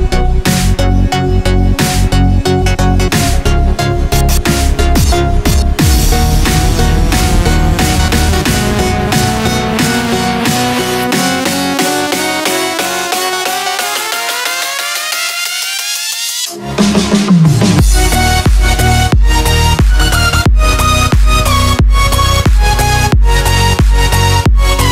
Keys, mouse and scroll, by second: 0.6 F2, 1.9 right click, 3.3 click, 6.3 right click, 7.9 click, 13.2 ctrl+v, 14.7 BackSpace, 22.8 Num_Lock, 22.8 KP_4.